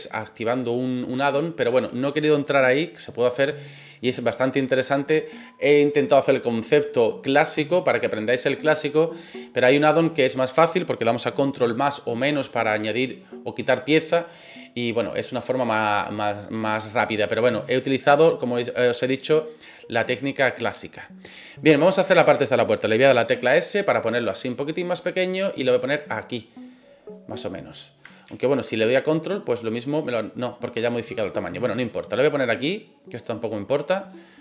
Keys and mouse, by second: 16.9 middle click, 18.2-20.5 drag, 21.7-22.0 middle drag, 23.3 s, 24.3 click, 24.6 middle click, 25.5-26.8 drag, 27.1 middle click, 28.2 ctrl+z, 29.1-30.6 ctrl+drag, 30.8-31.2 middle drag, 31.7-33.3 drag, 33.5 middle click.